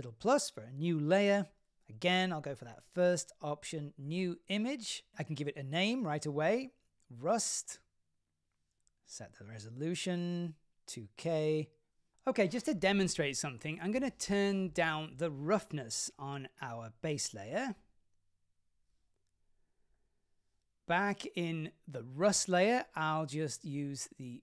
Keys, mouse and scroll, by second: 0.5-12.5 drag, 14.8 click, 17.2-18.5 drag, 18.8 scroll down 2, 19.1 middle click, 20.3 scroll up 3, 22.4 click.